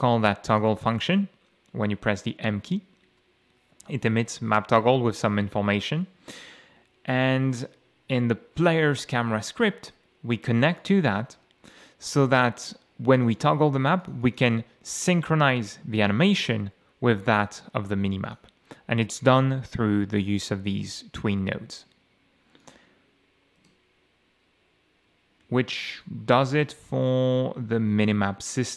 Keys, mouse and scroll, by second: 0.5 click, 7.2-7.5 scroll down 2, 8.6 click, 9.5-9.8 scroll down 2, 10.8 click, 11.6-11.9 scroll down 2, 12.3 scroll down 2, 13.1 click, 14.0 click, 18.2 click, 22.6 click, 23.7 F6, 25.1-27.6 typing.